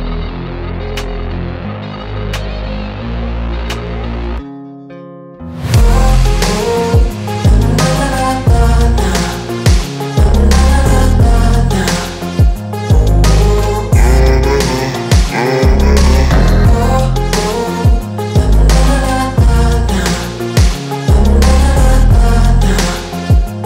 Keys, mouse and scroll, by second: 0.4 ctrl+2, 1.3 KP_1, 1.9 g, 3.2 KP_0, 3.7 Tab, 5.3 scroll up 1, 5.5 shift+middle click, 6.2 1, 6.5 click, 7.1 2, 7.2 click, 7.4 alt+shift+click, 7.6 alt+shift+click, 8.0 alt+shift+click, 8.3 alt+shift+click, 8.7 alt+shift+click, 9.1 alt+shift+click, 9.4 alt+shift+click, 9.7 ctrl+b, 12.4 click, 12.8 shift+click, 13.2 shift+click, 13.6 shift+click, 14.0 shift+click, 14.3 shift+click, 14.8 g, 16.7 Tab, 17.0 scroll down 1, 17.2-17.8 middle drag, 17.8 KP_0, 18.9 s, 20.8 click, 22.0-22.3 drag, 22.6-23.6 drag.